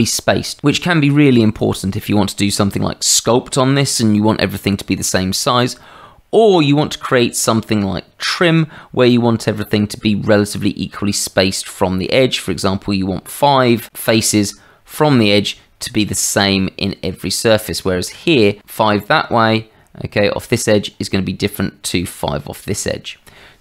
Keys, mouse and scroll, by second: 9.1 middle click, 11.5 shift+middle click, 16.8 middle click, 17.7 shift+middle click.